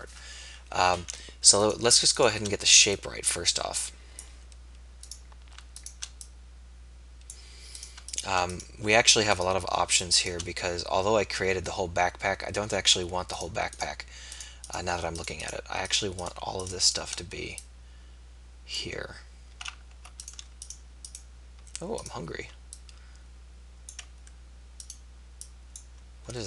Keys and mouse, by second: 0.5 KP_3.